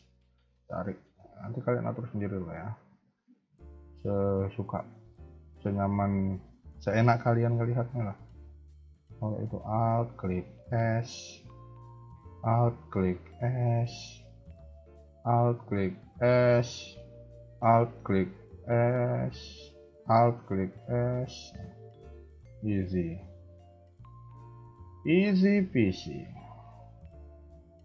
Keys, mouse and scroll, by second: 2.5 alt+click, 3.1 s, 5.1 alt+click, 5.6 shift+middle click, 7.0 s, 9.8 alt+click, 10.4 s, 12.6 alt+click, 13.2 s, 15.0 alt+click, 15.4 s, 16.7 shift+middle click, 17.9 alt+click, 18.5 s, 19.8 alt+click, 20.2 s, 21.8 alt+click, 22.5 alt+shift+click, 23.3 a, 23.5 a, 23.9-24.5 scroll down 2, 24.7 shift+middle click, 26.6 click, 27.0-27.5 scroll up 1, 27.5 b.